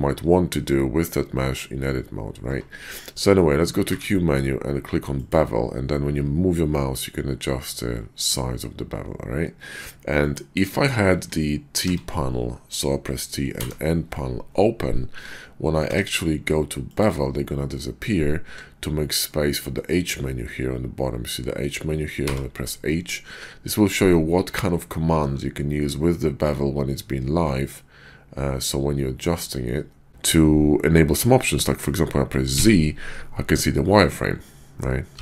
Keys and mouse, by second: 2.5 Tab, 11.7 t, 13.6 n, 15.9 q.